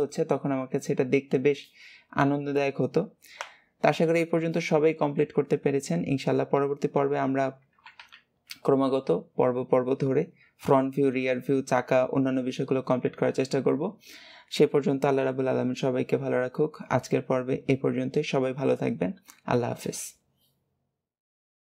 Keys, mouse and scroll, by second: 8.0 KP_3.